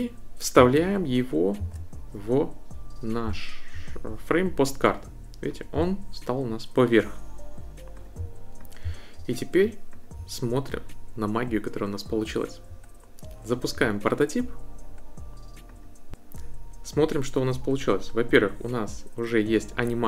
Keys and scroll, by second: 1.6 super+v.